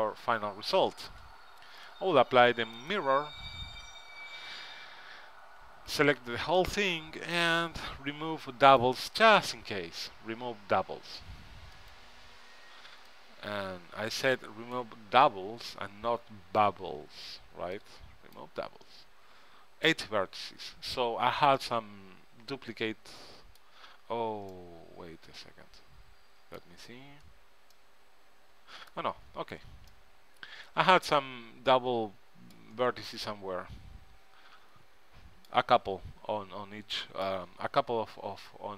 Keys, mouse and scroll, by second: 1.9 ctrl+Up, 3.9 ctrl+Up, 5.8 Tab, 6.1 a, 6.3 a, 8.8-10.4 drag, 12.0-16.7 drag, 16.7-21.3 right drag, 21.7-23.8 middle drag, 24.1-26.4 middle drag, 27.0-31.9 middle drag, 33.0-35.2 middle drag, 37.3-38.7 middle drag.